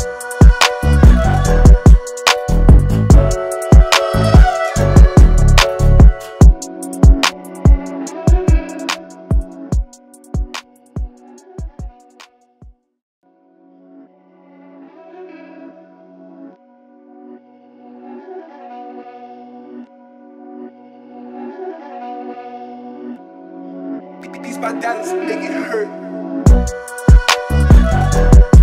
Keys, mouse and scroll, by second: 6.7 alt+scroll down 1, 7.1 space, 7.1 click, 8.0 alt+scroll down 1, 8.3 click, 10.1 alt+scroll up 1, 10.5 space, 10.6 click, 18.4 space, 18.5 click, 18.9 space, 19.5 alt+scroll down 1, 20.0 space, 20.0 click, 23.3 click, 25.3 space, 25.5-27.4 drag.